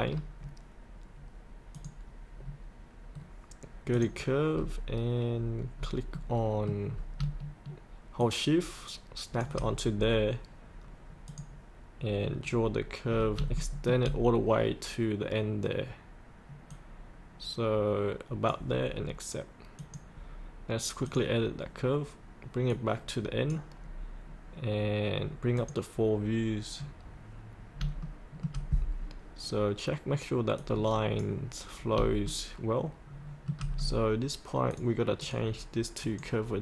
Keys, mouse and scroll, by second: 0.0 scroll down 1, 1.7 click, 3.1-3.9 scroll down 1, 3.9 click, 4.5-5.3 scroll down 1, 5.3 scroll up 1, 6.1 middle click, 6.9 scroll down 1, 8.2 shift+click, 9.9-11.2 scroll up 1, 11.2 click, 12.5-13.1 scroll down 1, 13.1 scroll up 1, 13.6 shift+middle click, 16.7-19.1 drag, 23.2 click, 23.8 scroll up 1, 25.6 click, 28.0 shift+middle click, 30.6 click, 31.8 scroll up 1, 32.3-33.6 shift+middle drag, 34.7 click.